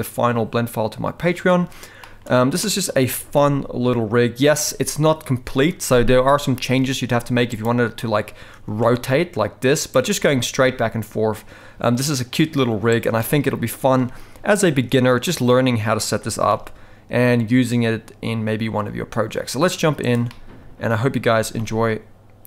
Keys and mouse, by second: 2.0 shift+middle drag, 2.6 middle drag, 3.1 g, 8.6 r, 10.2 g, 13.2-16.0 middle drag, 16.2 g, 20.3-20.9 middle drag, 21.3 g.